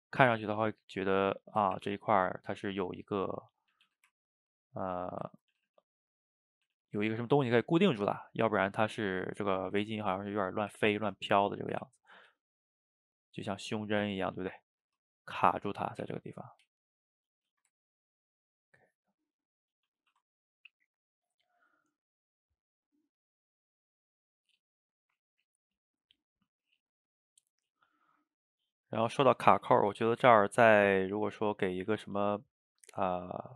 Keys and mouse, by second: 0.3 s, 1.1 middle click, 1.8 r, 2.6 g, 3.7 a, 4.1-5.2 ctrl+middle drag, 5.2 shift+right click, 5.4 ctrl+middle drag, 5.6 a, 5.7 a, 6.0 drag, 6.4 middle click, 6.6 a, 6.8 a, 7.1-9.3 ctrl+middle drag, 9.3 click, 9.7 shift+right click, 9.9-10.8 ctrl+middle drag, 10.8 r, 11.8 r, 12.3 g, 14.1 a, 14.3 a, 14.8 click, 14.9-16.1 middle drag, 16.1 r, 16.7 g, 17.6-18.7 ctrl+shift+middle drag, 19.5 middle click, 19.9 a, 20.1 a, 20.3-25.6 ctrl+middle drag, 28.5-29.4 middle drag, 29.4 shift+right click, 29.8-33.5 ctrl+shift+middle drag.